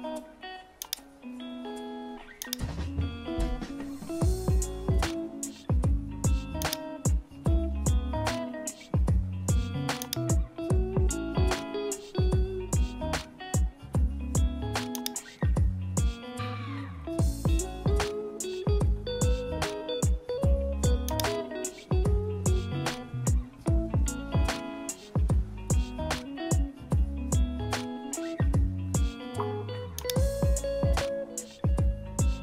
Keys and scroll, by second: 32.2 super+-.